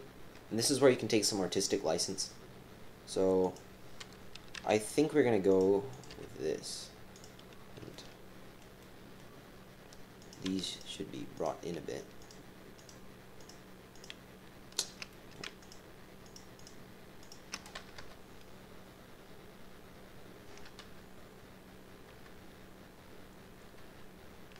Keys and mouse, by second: 3.5 click, 4.5 g, 5.9 click, 6.1 g, 7.9 middle click, 8.8 middle click, 10.2 right click, 10.7 shift+click, 12.2 shift+click, 12.7 shift+click, 13.4 shift+click, 13.9 shift+click, 15.1 click, 15.6 shift+click, 16.6 shift+click, 17.2 shift+click, 18.0 KP_1, 20.8 KP_3, 22.1 KP_3, 22.2 KP_1, 23.8 KP_3.